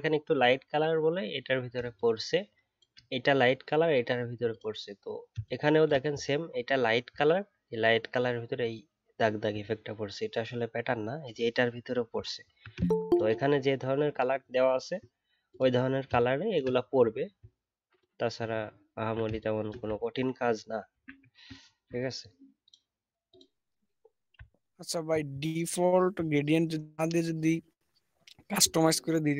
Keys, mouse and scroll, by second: 6.4-7.1 alt+scroll up 1, 9.5 alt+scroll up 1, 9.5 alt+scroll down 1, 10.3-12.1 alt+scroll up 1, 12.1 alt+scroll down 1, 18.4 alt+scroll down 1, 19.9 alt+scroll down 2, 20.1-20.8 alt+scroll up 1, 21.5-24.3 alt+scroll down 1, 24.3 alt+scroll down 1, 24.6 alt+scroll up 1.